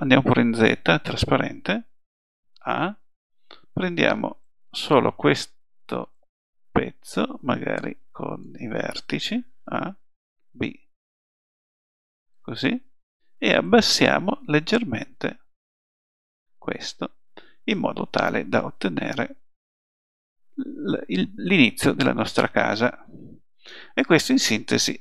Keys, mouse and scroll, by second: 0.1 z, 2.7 a, 3.5 b, 9.6 click, 9.6 a, 10.3 b, 13.6-16.2 drag, 17.0 middle click, 17.4 middle click, 18.8 z, 19.6-20.6 middle drag, 22.1-23.4 middle drag, 23.6 middle click, 23.8-25.0 middle drag.